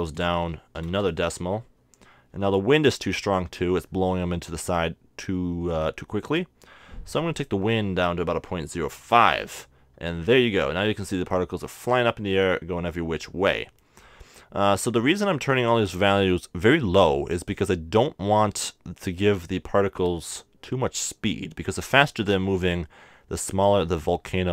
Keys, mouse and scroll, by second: 7.4-9.0 drag, 23.5-24.5 middle drag.